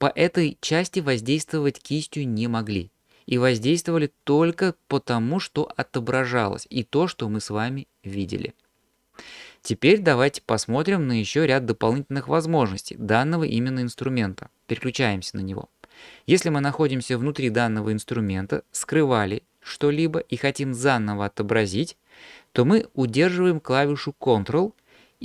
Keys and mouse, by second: 14.7 click, 18.3-19.8 drag.